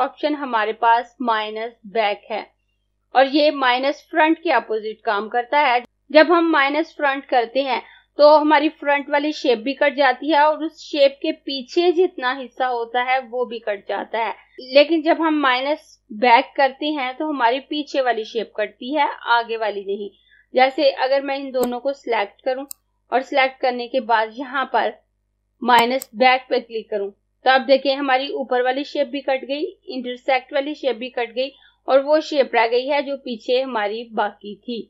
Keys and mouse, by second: 21.6 click, 25.7 click.